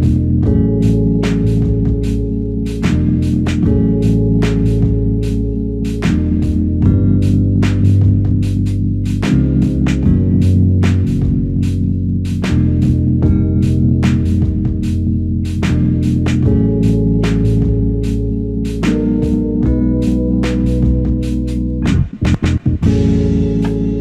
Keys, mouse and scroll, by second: 0.9 f, 10.3 double click, 21.1 f, 23.5 double click.